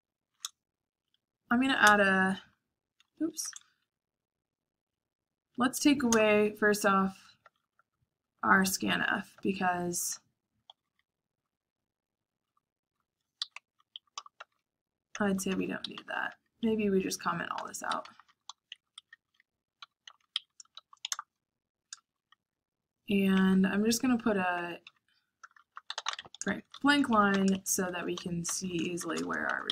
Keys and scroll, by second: 0.9 Up, 1.3 Up, 2.0 Return, 3.2 ctrl+c, 3.6 Up, 3.8 Up, 4.8 Up, 5.5 Up, 6.0 Return, 7.3-20.3 typing, 21.9 shift+;, 23.0 Escape, 23.1-26.4 typing.